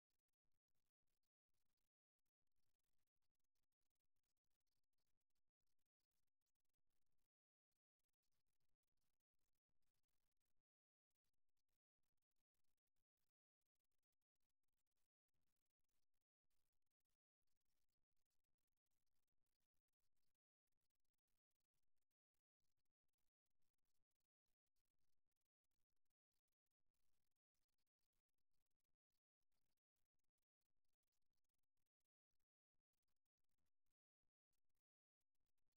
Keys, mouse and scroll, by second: 2.7-5.2 middle drag, 5.2 KP_1, 6.7-8.4 middle drag, 8.9-10.7 right drag, 10.7 middle click, 12.3-15.5 right drag, 16.1-19.9 right drag, 21.1-23.3 right drag, 23.3 f, 27.4-29.1 right drag, 31.7-33.3 right drag, 33.7-34.9 right drag.